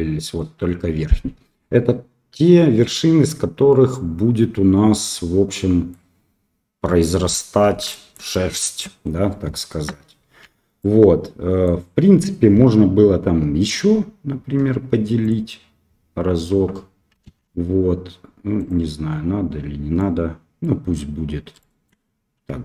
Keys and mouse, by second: 3.2-5.9 middle drag, 7.9 shift+middle click, 8.3 middle click, 10.4 a, 10.8 middle click, 14.5 w, 17.2 alt+a, 18.5 click, 19.9 middle click, 21.5 shift+middle click.